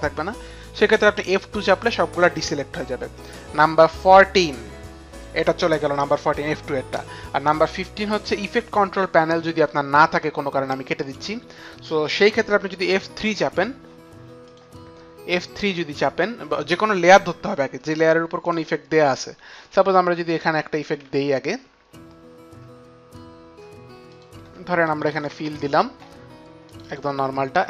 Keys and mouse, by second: 11.0 click, 14.5 click, 16.9 click, 16.9 click, 18.4 click, 20.3 click, 24.1 click, 24.5 click, 24.7-27.2 typing, 24.9 click, 25.4 click, 25.5 click, 26.0 click, 26.7 click.